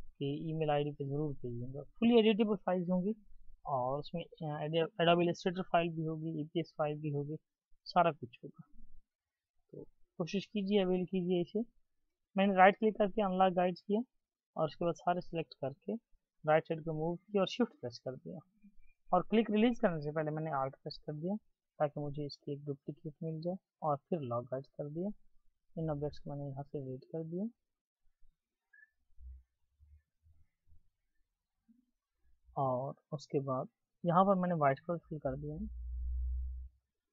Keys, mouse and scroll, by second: 0.8-3.3 scroll up 1, 8.4-9.1 alt+scroll down 1, 9.4-10.2 ctrl+scroll down 1, 10.2-10.8 ctrl+scroll up 1, 10.8 right click, 16.3 right click, 22.3 right click, 30.9 Delete.